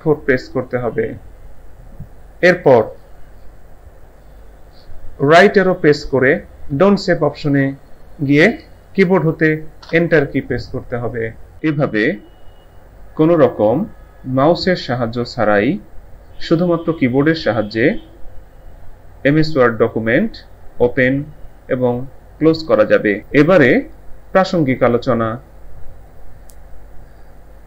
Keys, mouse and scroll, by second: 6.7 Right, 9.8 Return, 11.5 click.